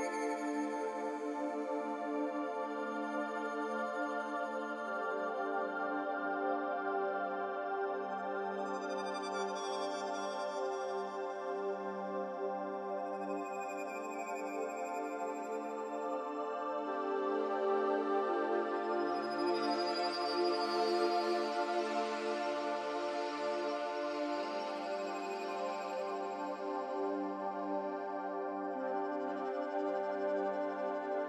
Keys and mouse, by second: 1.3 s, 4.9 g, 8.1 s, 13.1 Tab, 17.0 Tab, 17.9 click, 19.6 alt+shift+click, 22.2 u, 24.1-24.9 drag, 26.1 r, 29.8 click, 30.4 3.